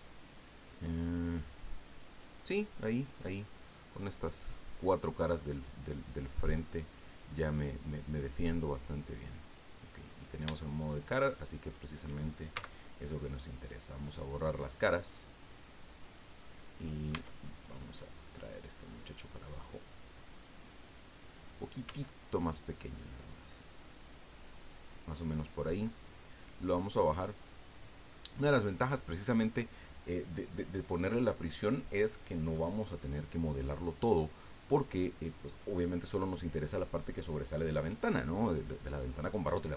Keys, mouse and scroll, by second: 0.3 click, 10.1 right click, 10.8 shift+right click, 11.2 shift+right click, 11.6 shift+right click, 12.5 shift+x, 14.2 click, 15.1-16.3 middle drag, 16.4-16.7 scroll up 1, 17.1 Tab, 17.5 right click, 18.5-21.2 drag, 21.8 s, 24.6 click, 25.8-28.5 drag.